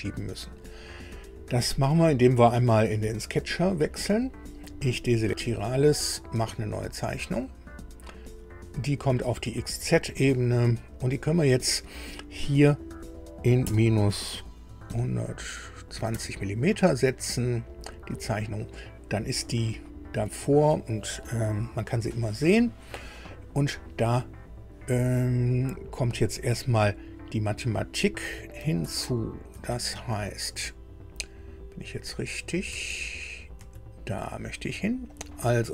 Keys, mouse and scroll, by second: 1.8 click, 3.3 click, 4.6 click, 7.0 click, 9.5 click, 11.0 click, 13.7 KP_Subtract, 14.9 KP_1, 16.0 KP_2, 16.1 KP_0, 17.7 click, 19.4 shift+click, 28.9 alt+Tab, 29.6 alt+Tab, 29.9 alt+Tab, 32.7 Tab, 33.3 Tab, 35.1 click.